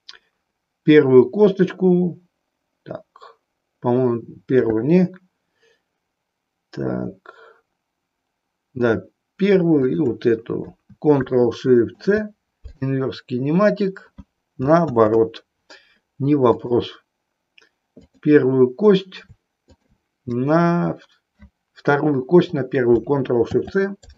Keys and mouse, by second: 9.8 shift+click, 14.9 ctrl+z, 16.5 click, 19.8 shift+click, 23.5 ctrl+shift+c.